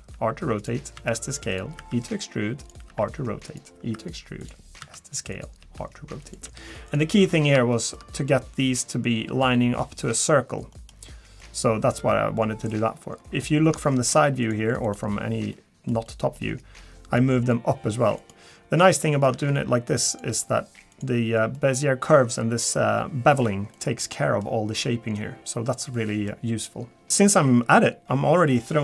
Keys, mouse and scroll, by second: 0.1 r, 0.9 s, 1.8 e, 2.9 r, 3.7 e, 5.6 r, 5.6 s, 6.4 g, 7.2-7.5 scroll up 4, 7.7 shift+middle click, 10.7 middle click, 10.9-11.5 scroll down 3, 11.4 middle click, 12.4 middle click, 13.0-13.7 scroll up 6, 13.3 click, 13.3 KP_1, 13.9 shift+middle click, 14.4 click, 14.8 click, 15.5 middle click, 16.0 middle click, 16.2 shift+middle click, 17.1 g, 18.5 scroll down 1, 19.0 shift+middle click, 20.1 click, 20.3 g, 21.5 middle click, 23.7 middle click, 24.8 middle click, 26.0 middle click, 27.0 middle click.